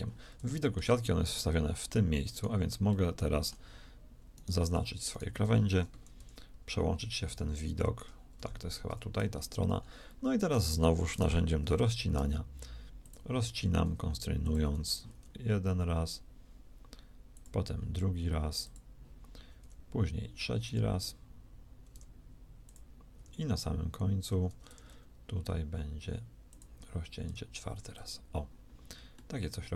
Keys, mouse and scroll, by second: 6.0 KP_3, 7.1 ctrl+KP_3, 8.2 KP_3, 11.4 k.